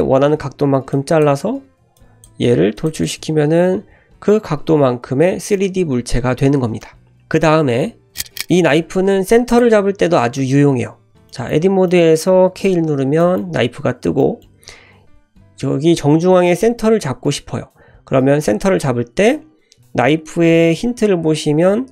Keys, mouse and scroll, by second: 0.9-1.3 drag, 1.4 e, 1.9 click, 2.4 e, 2.9 Tab, 3.0 click, 5.5-6.8 middle drag, 6.1 typing, 9.0 scroll down 1, 9.5 click, 11.0 Tab, 11.3 middle click, 11.9 middle click, 12.5 k, 12.9-13.2 scroll up 1, 13.2-21.9 shift+middle drag.